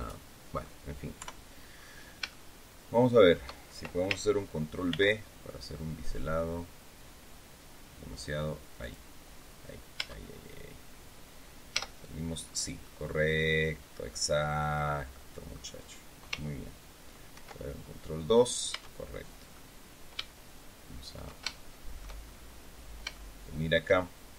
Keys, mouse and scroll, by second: 1.1 KP_3, 1.6-2.0 scroll down 1, 2.2-3.4 shift+drag, 4.8 ctrl+b, 8.7 click, 9.3-9.6 scroll down 2, 9.8 Tab, 10.3-10.7 scroll down 2, 11.6 z, 12.3-12.7 scroll up 1, 12.7-15.6 drag, 17.2 ctrl+2, 18.6 Tab, 19.4-22.1 drag, 23.0 shift+middle click.